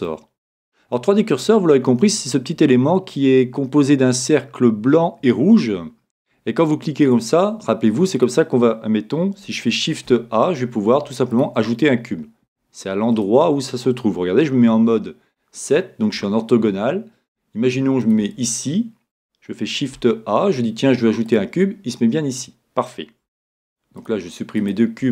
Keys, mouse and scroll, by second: 0.2-1.6 middle drag, 1.6-2.1 scroll down 2, 2.1-3.2 middle drag, 6.6-9.9 drag, 9.9 shift+a, 11.9-13.6 middle drag, 13.1-14.9 drag, 14.5 KP_7, 15.7-17.8 middle drag, 18.0-19.7 drag, 19.7 shift+a, 23.2 x, 24.6 right click, 25.0 x.